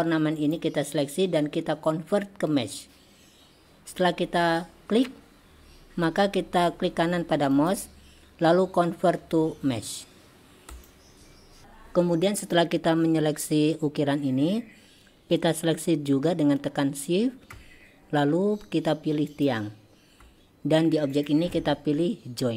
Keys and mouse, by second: 0.4 click, 7.6-11.2 right drag, 19.3 shift+click, 21.3-22.5 drag.